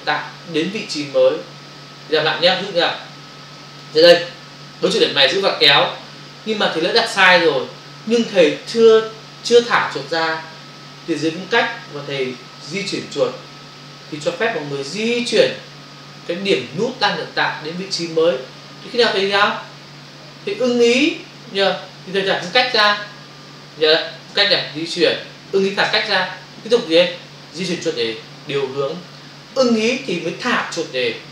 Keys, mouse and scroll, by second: 2.6 space, 5.2 click, 12.1 space, 24.2 space.